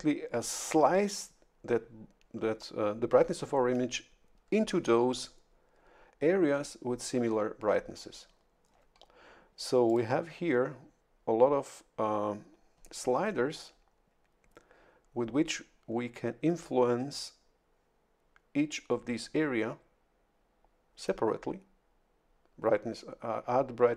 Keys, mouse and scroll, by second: 9.9 click.